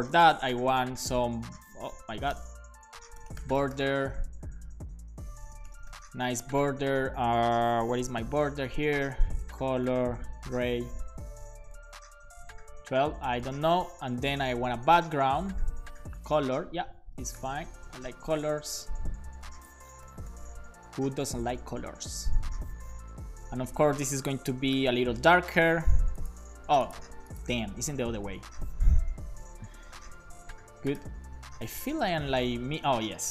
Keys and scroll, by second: 0.0-6.1 typing, 7.8-12.4 typing, 13.4 super+s, 13.8 Return, 14.4 Return, 16.2 Return, 17.0-18.1 typing, 18.9 alt+shift+Right, 19.6 alt+shift+Right, 20.9 super+c, 21.0 Down, 21.4 Left, 21.5 Left, 21.9 super+v, 22.3 super+s, 23.4 Left, 24.3 BackSpace, 25.0 super+s, 28.0 BackSpace, 28.4 2, 29.2 shift+Up, 29.7 BackSpace.